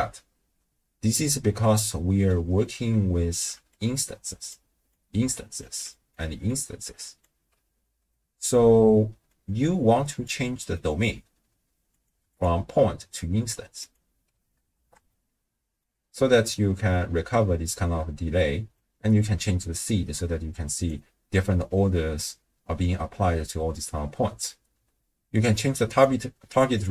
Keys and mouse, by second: 1.7 middle click, 2.6 middle click, 3.5-6.2 typing, 3.8 click, 5.0 click, 6.1 middle click, 6.6 click, 7.2 d, 7.3 d, 8.2 middle click, 8.2 d, 9.3-10.3 drag, 10.5 click, 12.3-14.1 drag, 14.8 shift+space, 15.1-15.8 middle drag, 15.9 space, 17.2 space, 18.8-20.9 drag, 25.9 click, 26.5 click, 26.7 click.